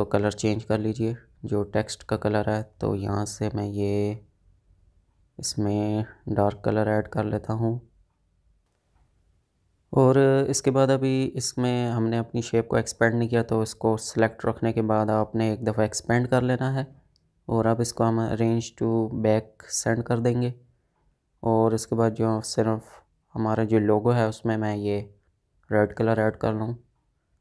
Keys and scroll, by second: 8.9 ctrl+z.